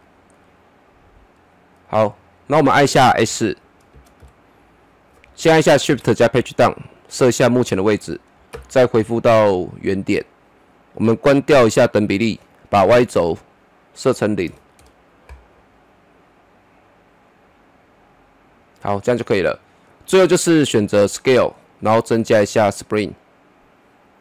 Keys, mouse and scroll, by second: 0.0 middle click, 0.5-1.4 scroll down 1, 1.4 middle click, 2.0-2.6 scroll down 1, 3.2 s, 4.2 typing, 5.9 shift+Page_Down, 7.4 click, 8.5 shift+Page_Up, 12.0 click, 14.5 KP_0, 14.8 Return, 17.0-21.2 drag.